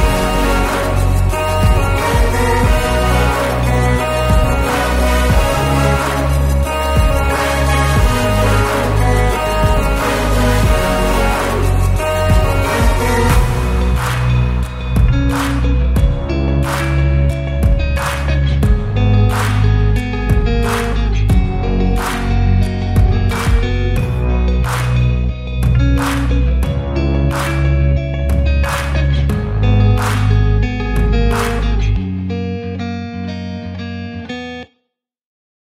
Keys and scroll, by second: 0.9 m, 2.0 1, 2.6 Return, 4.3 9, 4.8 Return, 6.5 m, 7.5 Up, 8.9 e, 9.8 space, 10.2 p, 10.9 space, 12.9 m, 13.7 Right, 14.9 p, 15.5 space, 16.6 m, 17.7 Up, 18.6 3, 19.6 Return, 20.2 p, 20.8 space, 24.7 r.